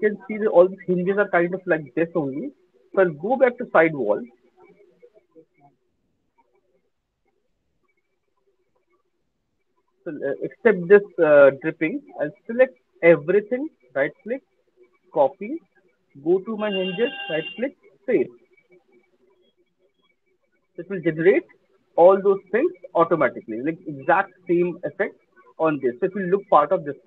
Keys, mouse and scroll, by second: 3.6 click, 5.1 middle click, 5.8 click, 7.5 click, 8.1 click, 8.8 middle click, 9.3 middle click, 9.9 click, 12.0 click, 12.2 middle click, 13.1 shift+click, 13.7 click, 15.1 click, 16.4 click, 17.1 right click, 17.1 click, 18.0 click, 20.7 right click, 20.7 alt+click, 20.9 alt+middle click, 23.8 alt+click, 24.4 alt+click, 26.1 alt+click, 26.2 alt+right click, 26.7 alt+middle click.